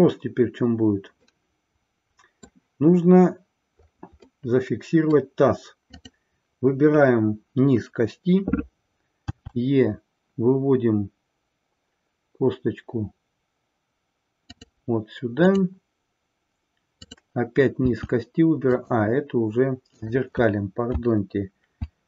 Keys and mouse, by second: 1.5-2.5 middle drag, 4.3-5.2 middle drag, 6.0 click, 14.5 click, 16.9 click, 18.7 click, 20.0 click.